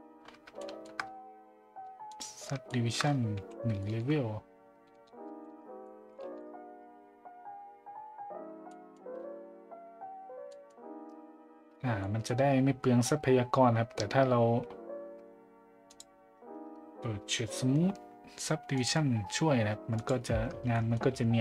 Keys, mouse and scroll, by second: 0.6 shift+middle drag, 2.1 click, 2.6 shift+middle click, 3.8 shift+middle click, 5.3 shift+z, 5.8-7.2 shift+middle drag, 6.3 shift+z, 8.7 middle drag, 10.5 middle drag, 12.0 middle drag, 15.9 click, 18.7 click, 19.9 click, 20.7 middle drag.